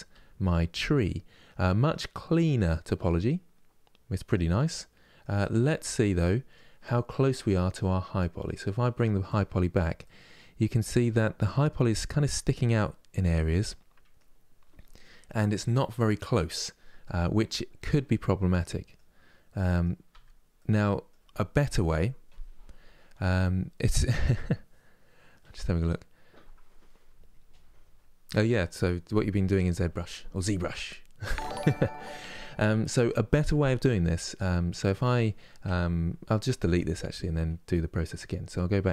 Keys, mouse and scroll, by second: 19.8 Tab, 34.5 Tab, 36.4 Tab.